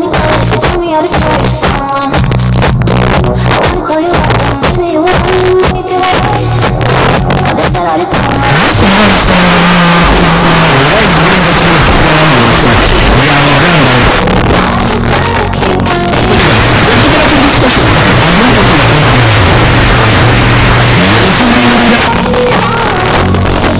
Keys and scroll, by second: 1.7 Down, 1.9 Down, 2.0 Down, 2.2 Down, 2.3 Down, 2.7 Down, 3.0 Down, 3.4 Down, 4.0 Up, 4.9 Down, 5.2 Return, 14.1 Page_Down, 21.9 Page_Down.